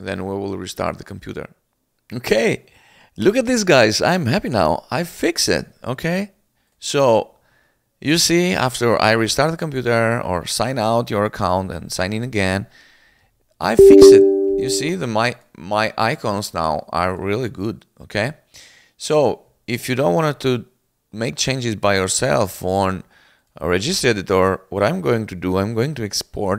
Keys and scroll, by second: 12.7-13.7 typing, 13.9 Return.